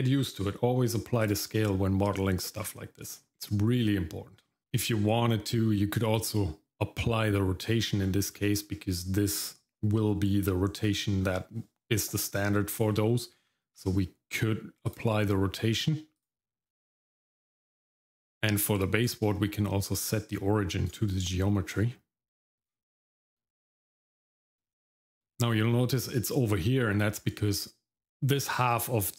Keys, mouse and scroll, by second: 2.3 shift+middle click, 4.5 middle click, 4.6 scroll down 1, 8.0-8.3 scroll down 2, 8.3 middle click, 10.8 middle click, 11.2-12.9 scroll up 1, 12.9 middle click, 13.7 ctrl+a, 16.2 click, 17.0 middle click, 17.6 middle click, 18.0 scroll down 1, 18.3 middle click, 18.7-19.2 scroll up 1, 20.9-22.7 right drag, 24.7 shift+middle click, 25.3 middle click.